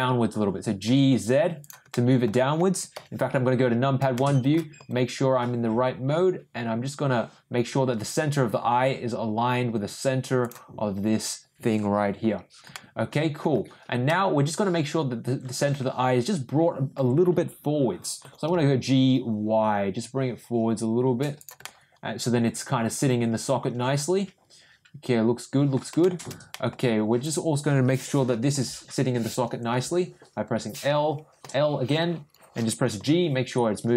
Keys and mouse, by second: 1.9 middle click, 4.1 shift+middle click, 4.8 g, 12.7 middle click, 14.0 middle click, 14.8-16.9 middle drag, 18.2 g, 21.6-25.7 middle drag, 26.0 shift+middle click, 26.5 middle click, 27.2 click, 28.5 l, 31.4 l, 33.0 g.